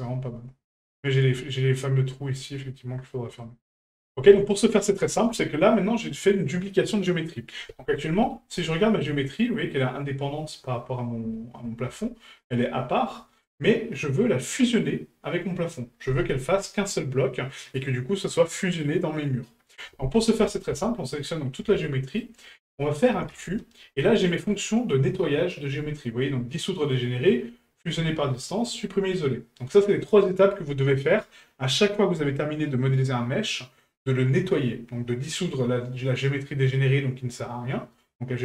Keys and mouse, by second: 2.8-3.4 middle drag, 3.9 shift+middle drag.